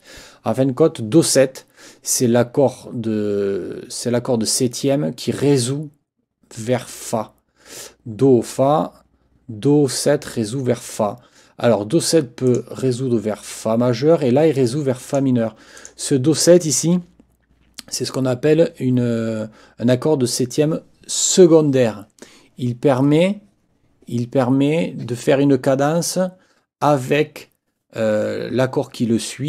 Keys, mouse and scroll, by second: 12.5 click, 15.1 click, 15.8 click.